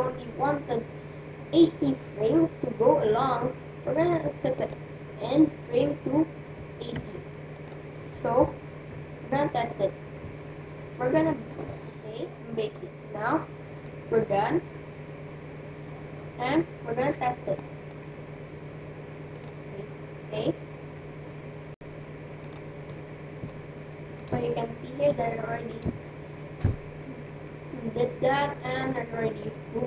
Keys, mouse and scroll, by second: 4.7-6.5 drag, 13.9-15.7 middle drag, 17.6-21.1 drag, 22.5-24.3 drag, 23.4-27.0 middle drag, 29.5-29.8 right drag.